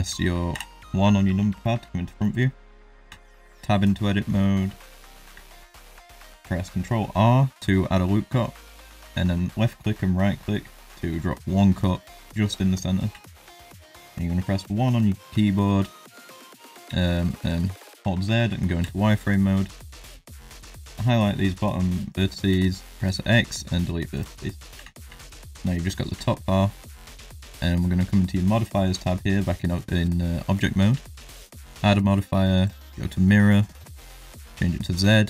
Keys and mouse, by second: 0.5 KP_1, 1.6 shift+middle drag, 2.2 shift+middle drag, 3.1 Tab, 3.5 shift+middle click, 5.3 ctrl+r, 13.1 1, 16.8 z, 19.9 click, 22.5 x, 24.7 Tab, 25.2 shift+middle drag, 26.2 shift+middle drag, 27.4 click, 31.5-32.7 drag, 33.8 click, 34.3 click.